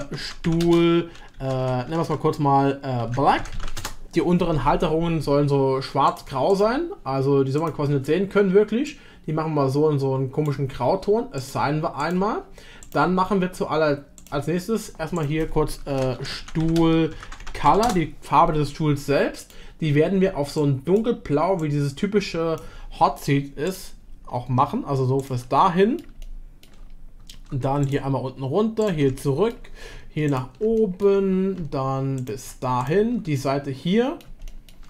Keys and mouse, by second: 2.0 BackSpace, 6.5 click, 7.6 click, 12.8 click, 14.2 click, 15.2-18.5 drag, 19.4-21.8 drag, 25.6 click, 26.2 shift+click, 29.2 middle click, 30.3 ctrl+click, 30.8 middle click, 32.2 ctrl+click, 32.8 shift+click, 33.4-33.8 middle drag, 34.5 shift+middle drag.